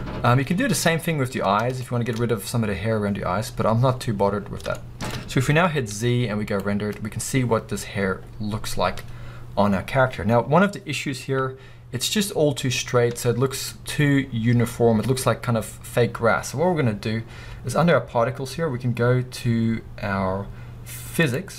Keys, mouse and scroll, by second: 0.5 scroll up 1, 2.2 scroll up 2, 3.5 scroll down 1, 5.2-5.7 scroll up 2, 6.8 z, 13.6 z, 13.7-14.5 middle drag, 14.2 scroll up 2.